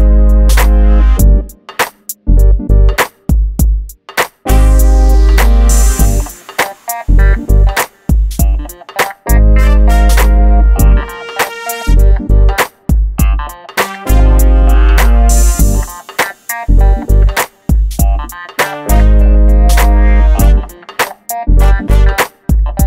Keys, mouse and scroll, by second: 0.9 click, 1.8 g, 2.1 click, 2.6 right click, 3.1 click, 3.8 right click, 5.6 click, 6.5 middle click, 7.2-7.6 scroll down 1, 7.6 middle click, 8.1-8.5 scroll up 1, 8.5 click, 9.1-10.1 scroll up 1, 10.2 l, 10.8 click, 11.9 scroll down 1, 12.3 scroll up 1, 12.9 click, 14.5 m, 14.7 click, 16.8 middle click, 17.6 t, 18.6 click, 21.0-21.4 scroll up 1, 21.7-22.8 drag.